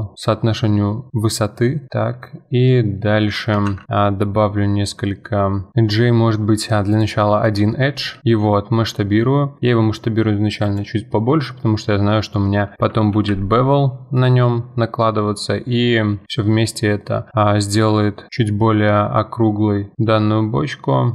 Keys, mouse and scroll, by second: 3.2 Tab, 3.7 ctrl+r, 11.1-13.1 middle drag, 13.1 ctrl+b.